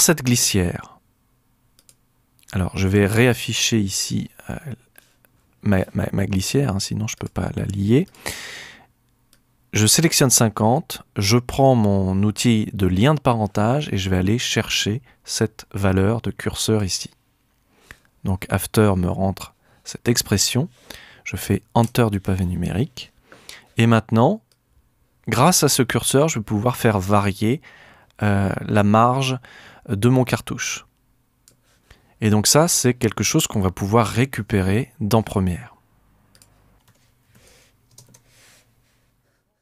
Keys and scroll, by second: 21.8 Home, 36.7-37.8 typing.